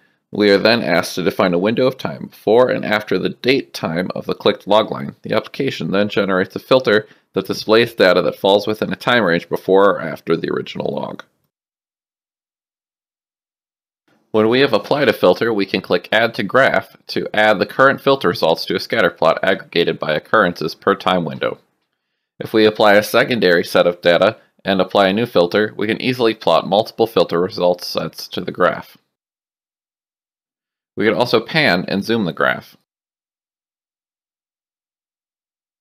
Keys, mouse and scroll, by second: 2.5 click, 3.8 click, 16.2 click, 20.2 click, 21.0 ctrl+n, 22.1 shift+right click, 24.2 click, 27.5 click, 29.8 click, 34.3 click.